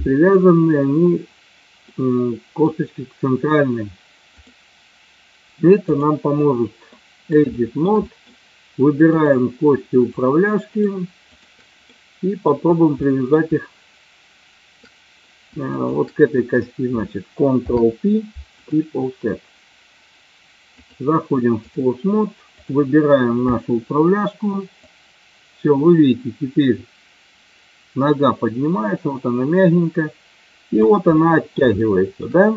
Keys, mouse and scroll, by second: 1.9 middle click, 4.5-6.0 drag, 6.9 middle click, 7.5 shift+middle click, 8.0 middle click, 9.0 click, 10.0 shift+click, 11.2 shift+click, 11.8 middle click, 13.0 middle click, 15.8 shift+click, 17.6 ctrl+p, 20.8 click, 22.5 click, 24.8-30.8 drag, 31.0-31.5 middle drag, 31.7-32.3 shift+middle drag.